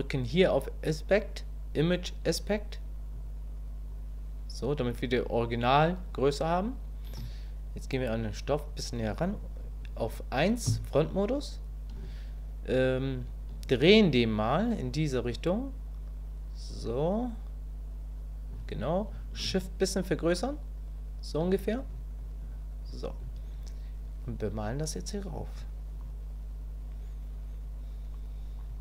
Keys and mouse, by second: 10.7 KP_1, 14.0-18.5 ctrl+drag, 19.5-21.4 shift+drag, 22.2 click, 24.5 click, 25.5-28.6 drag.